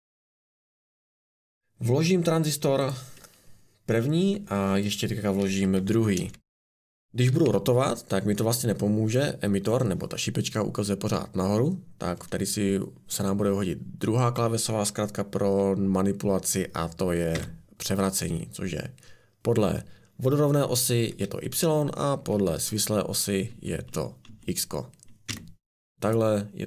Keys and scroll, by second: 4.3 Escape, 5.6 ctrl+c, 6.1 ctrl+v, 7.3 r, 7.4 r, 17.3 y, 20.6-23.5 typing, 25.0-25.8 typing.